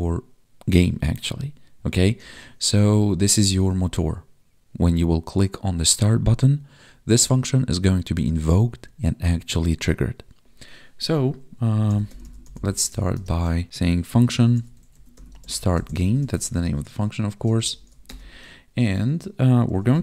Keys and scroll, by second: 2.9 ctrl+Down, 13.1 space, 17.3 Right.